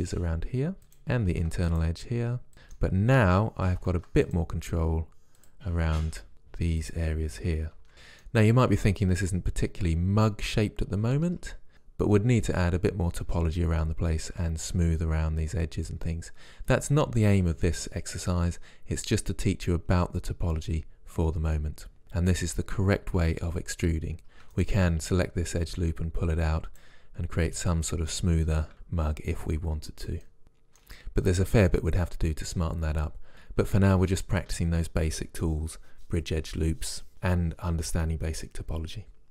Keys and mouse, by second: 1.3 ctrl+r, 2.3 middle click, 3.8 ctrl+r, 6.0 ctrl+r, 11.3 Tab, 24.6-25.6 right drag, 26.2 right click, 27.1 right click, 27.2 middle click, 28.7 right click, 28.9 click, 30.2 middle click, 33.3 Tab, 33.6 click, 33.7-39.3 middle drag.